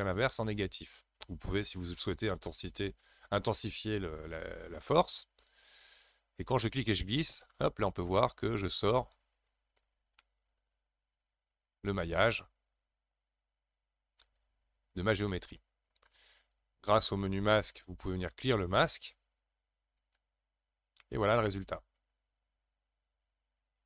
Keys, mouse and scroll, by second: 6.6 click, 10.2-13.3 middle drag, 17.7-20.7 drag, 21.0-23.8 middle drag.